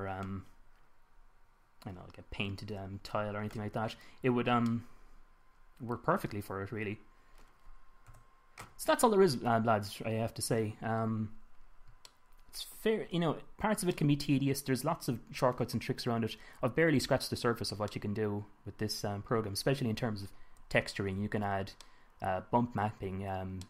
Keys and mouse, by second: 7.2-7.9 middle drag, 8.5 KP_1, 12.5-15.6 middle drag, 19.3 middle drag, 20.1-20.5 middle drag, 21.2-21.7 middle drag, 22.4 middle drag.